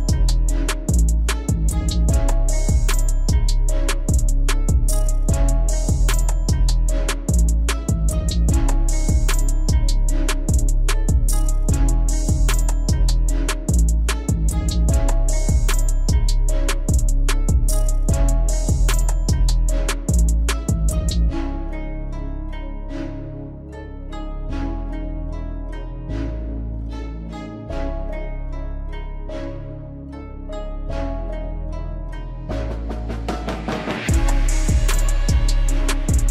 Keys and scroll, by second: 13.1 ctrl+a.